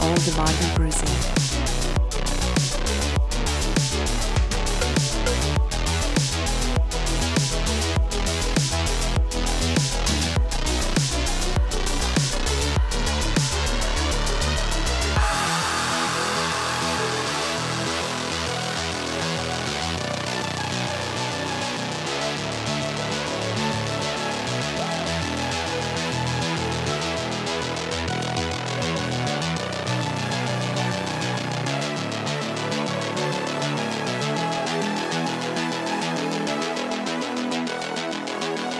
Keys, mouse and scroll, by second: 0.4 space, 1.7 space, 2.2 click, 2.3 right click, 3.9 click, 5.0 click, 7.0-8.8 typing, 10.2 click, 10.8 click, 11.2 click, 14.5 click, 15.6-23.9 typing, 17.7 Tab, 26.8 Return, 27.4 space, 29.0 space, 29.1 space, 29.8 space, 30.2 click, 30.4 right click, 31.5 click, 34.3-36.5 typing, 38.0-38.7 typing.